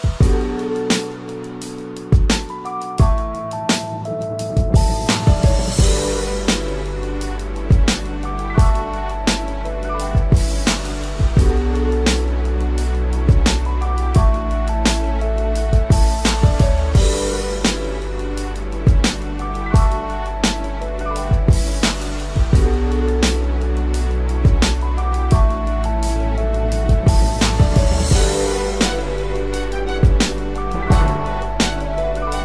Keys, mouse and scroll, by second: 1.5 double click, 15.3 ctrl+-, 15.5 ctrl+-, 15.7 ctrl+-, 16.9 space, 18.9 ctrl+n, 29.1 right click.